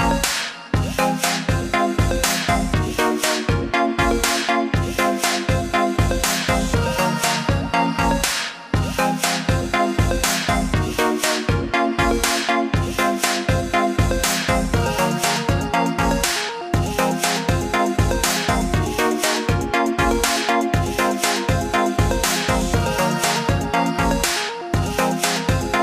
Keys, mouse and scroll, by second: 5.4 click, 6.2 scroll up 1, 8.4 right click, 17.7 click, 22.6 click, 25.0 click.